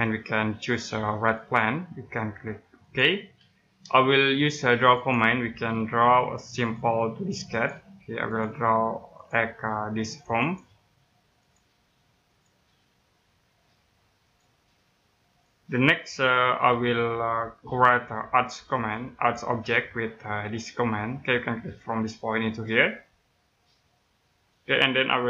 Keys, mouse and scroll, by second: 6.7 click, 15.9 middle click, 17.3-18.9 scroll up 1, 18.9 click, 22.5 click.